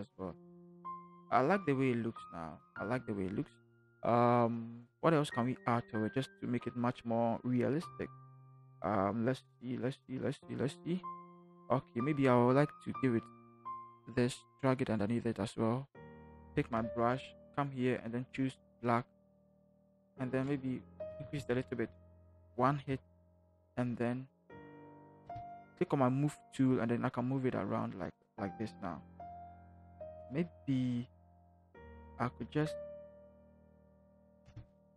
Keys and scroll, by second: 0.3 ctrl+h, 0.5 ctrl+h, 0.9 ctrl+h, 2.5 ctrl+h, 16.4 b, 20.8 ], 20.9 ], 21.1 ], 21.2 ], 23.1 ctrl+t, 25.2 Return, 26.3 v, 32.4 ctrl+t.